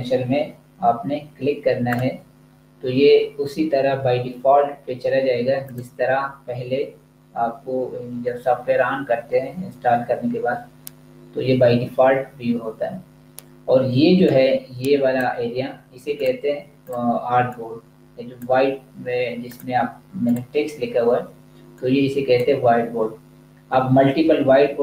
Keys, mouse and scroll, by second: 1.9 click, 5.7 click, 14.0 click.